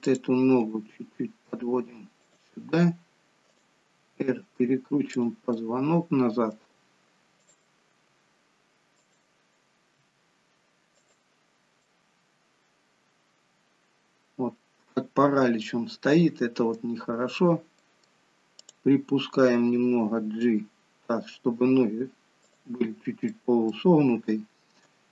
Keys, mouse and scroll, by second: 0.0 click, 0.6 g, 3.4 click, 3.9 g, 5.5 middle click, 7.4 click, 8.0 g, 9.9 r, 11.8 middle click, 14.9-15.4 scroll up 3, 15.6 middle click, 17.1-17.8 scroll down 2, 17.8 middle click, 18.5 click, 20.0 g, 23.2 middle click, 24.2 shift+middle click.